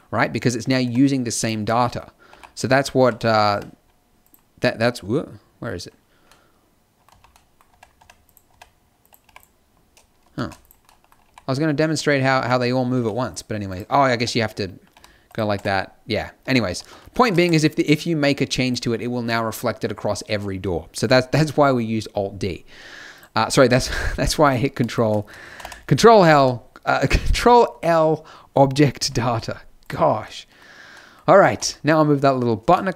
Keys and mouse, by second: 0.8 Tab, 2.3 g, 3.5 Tab, 7.1 z, 7.7 Tab, 8.0 Tab, 8.5 Tab, 9.2 g, 10.5 ctrl+z, 11.3 g, 12.4 Tab, 12.9 z, 14.2 Tab, 14.9 g, 15.5 Tab, 16.4 Tab, 16.8 ctrl+z, 17.0 ctrl+z, 17.5 Tab, 23.1-25.5 drag, 25.5 ctrl+l, 29.8 click, 31.4 g.